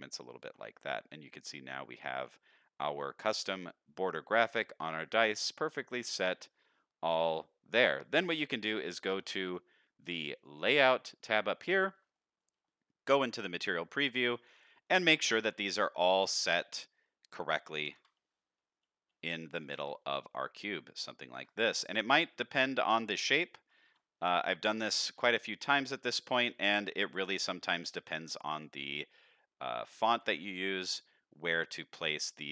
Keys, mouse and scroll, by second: 0.4 Tab, 0.8-1.2 middle drag, 1.4-1.9 middle drag, 2.1-3.3 middle drag, 3.9-4.4 middle drag, 4.6-5.1 middle drag, 5.6 middle drag, 6.2-6.5 middle drag, 7.4-7.8 middle drag, 8.0 shift+middle click, 8.4-8.7 middle drag, 8.9 shift+middle drag, 10.4 click, 11.7 shift+middle click, 12.1 middle click, 12.5 z, 13.8-14.1 scroll up 2, 14.1 shift+middle click, 14.5 click, 14.8-15.3 middle drag, 15.6 shift+middle click, 16.3 KP_3, 17.8 ctrl+KP_3, 18.6-19.2 scroll up 1, 19.2 scroll up 1, 19.6 g, 21.7 middle click, 22.6 click, 23.8 ctrl+KP_1, 25.1 KP_1, 26.0-26.4 shift+middle drag, 27.0 g, 30.5 shift+middle drag, 32.0-32.5 middle drag.